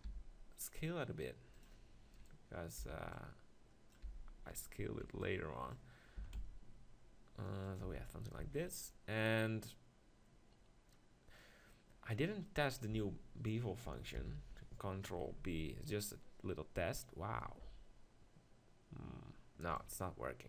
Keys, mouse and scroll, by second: 1.6-3.5 drag, 2.1-3.4 right drag, 2.8 b, 3.5 right click, 4.1 b, 6.1 s, 7.8-9.6 drag, 7.9 Tab, 8.4 z, 11.0 middle click, 12.9 Tab, 14.2 ctrl+l, 15.4 ctrl+b, 19.8-20.4 right drag.